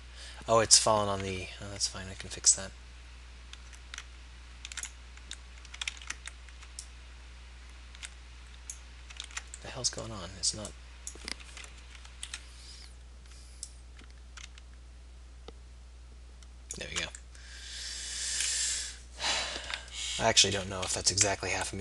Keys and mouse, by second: 6.0 ctrl+z, 6.8-8.8 drag, 9.2 ctrl+z, 9.7 click, 10.7 click, 11.4 ctrl+z, 11.9 KP_3, 12.2 KP_1, 19.0-21.0 middle drag, 21.0 KP_7, 21.7 KP_1.